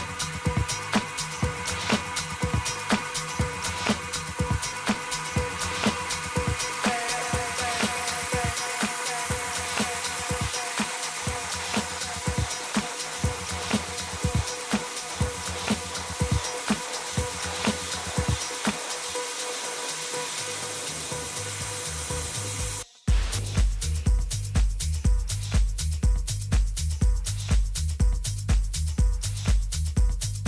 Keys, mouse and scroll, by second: 3.4 a, 3.8-10.3 middle drag, 10.3 a, 10.9 a, 11.3-15.3 middle drag, 15.3 a, 17.8 s, 24.0 KP_3, 25.4 a, 25.9-26.5 scroll up 1, 26.5 scroll down 1, 26.6-28.7 middle drag.